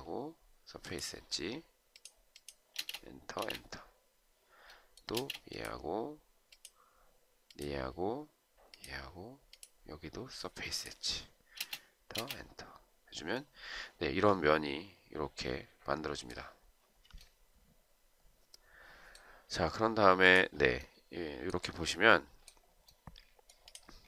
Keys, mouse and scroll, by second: 2.7 space, 3.2 space, 5.0 space, 11.5 space, 12.1 space.